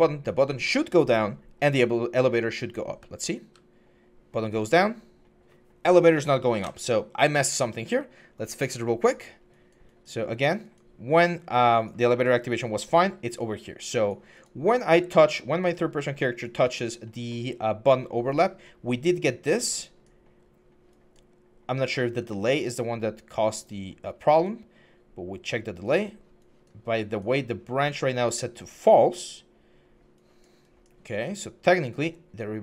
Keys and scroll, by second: 2.7-3.2 typing, 5.3 typing, 6.4 Escape.